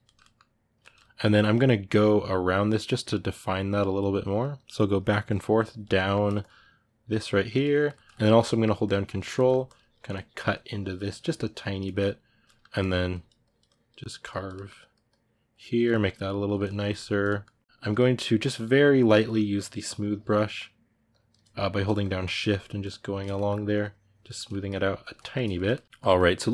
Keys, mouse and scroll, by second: 2.6-5.7 drag, 5.7 middle click, 6.0-7.5 drag, 7.5-8.6 ctrl+middle drag, 8.6 ctrl+click, 9.1 middle click, 9.4-11.6 ctrl+drag, 11.6 ctrl+middle click, 12.6-14.3 drag, 14.3 middle click, 14.9 click, 15.7 ctrl+middle click, 15.9 click, 16.2-17.7 ctrl+middle drag, 17.7-23.1 shift+drag, 23.1 middle click, 23.5 click, 24.1 ctrl+middle click, 24.4 click, 24.8-26.5 ctrl+middle drag.